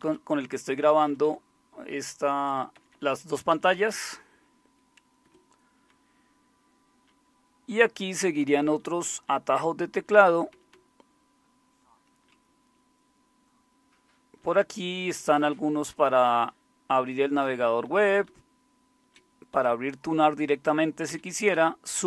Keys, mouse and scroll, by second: 0.9 Down, 2.7 Up, 2.9 Up, 3.5 Down, 3.7 Down, 5.2 Escape, 5.9 Down, 6.5-8.4 Down, 8.6 Down, 8.8 Down, 9.2 Down, 9.3 Down, 10.3 Down, 10.7-12.2 Down, 12.7-14.4 Down, 15.0 Down, 15.2 Down, 15.6 Down, 15.9 Up, 16.6-17.1 Up, 17.4 Down, 17.6 Down, 18.2-19.1 Down, 19.5 Up, 21.1 Down, 21.5 Up.